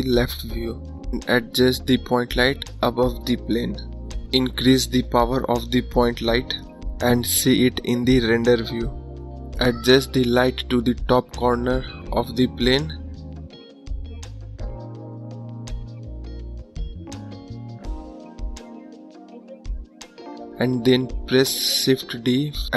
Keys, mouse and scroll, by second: 1.3 ctrl+click, 4.7 click, 7.6-8.6 drag, 10.0 click, 11.0 click, 17.1 click, 20.4 shift+d.